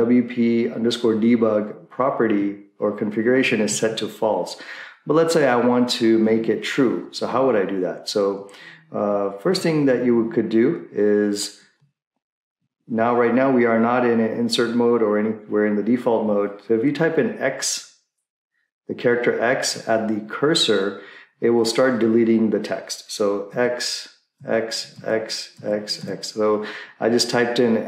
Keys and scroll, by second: 2.3 Right, 3.5 Right, 3.6 Right, 3.9 Right, 9.5 Left, 23.6-24.3 typing.